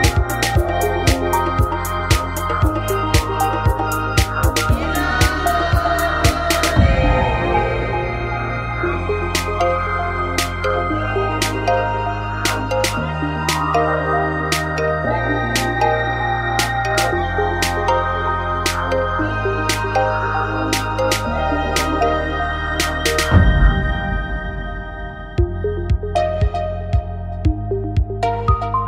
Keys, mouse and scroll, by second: 0.3 click, 2.1 f, 2.2 a, 3.5 click, 3.7 click, 3.9-6.0 drag, 7.5 g, 11.1 click, 12.0 e, 13.5-15.1 drag, 13.8 right click, 14.7 f, 14.8 a, 15.5-16.8 drag, 17.6 Up, 17.7 Up, 18.7 g.